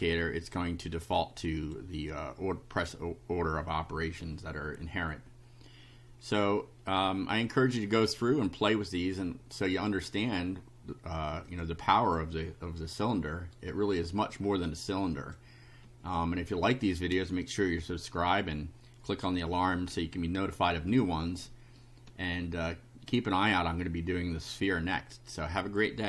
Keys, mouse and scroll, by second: 0.9 click, 4.1 scroll down 1, 9.5-10.0 scroll down 4, 10.6 scroll down 2, 11.5 click, 12.0 click, 12.5-13.3 scroll up 2, 13.6 right click, 14.3-15.5 drag.